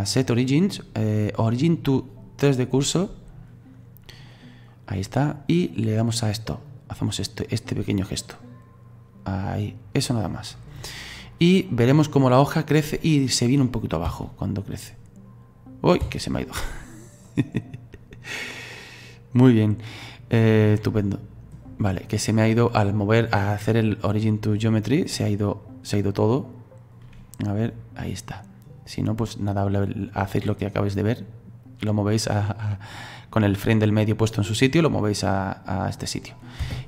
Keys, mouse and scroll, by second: 6.7-12.2 drag, 12.6-13.1 scroll down 2, 13.1-13.5 scroll up 2, 13.5 middle click, 14.1 space, 16.1 space, 16.4 middle click, 17.3-20.3 drag, 22.9 click, 23.8-29.2 drag, 36.2 click, 36.6 space.